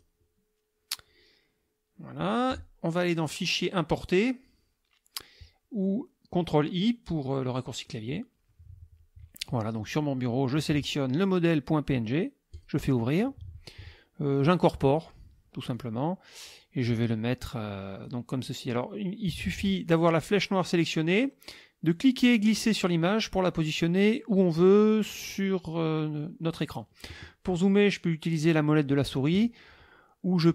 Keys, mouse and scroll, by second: 3.3 click, 7.9 click, 9.8 click, 12.5 click, 14.9 click, 15.7-18.3 drag, 20.3 click, 21.9-26.8 drag.